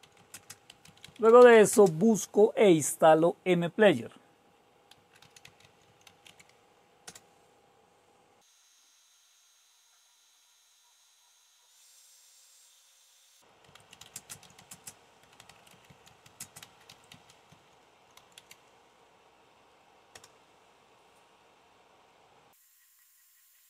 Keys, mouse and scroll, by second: 0.0-1.9 typing, 4.3-6.7 typing, 7.0 Return, 11.2-12.3 scroll up 3, 12.9-13.4 scroll down 2, 13.4-20.6 typing.